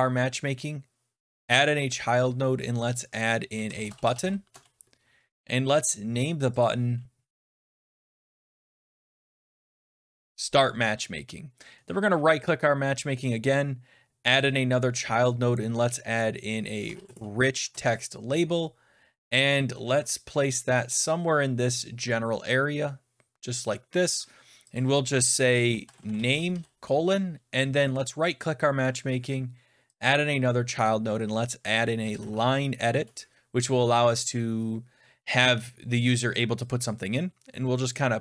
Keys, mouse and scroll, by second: 1.3 click, 3.3-4.6 typing, 5.8 click, 6.4-10.6 typing, 6.5 click, 11.8 click, 14.3 right click, 16.6-17.7 typing, 19.3-21.9 scroll down 15, 21.9 click, 21.9-22.7 scroll, 23.3 click, 24.0 click, 24.6 click, 25.5-26.9 typing, 27.8 middle click, 29.9 click, 31.6-32.7 typing, 32.9 Return, 37.8 click, 38.0 typing.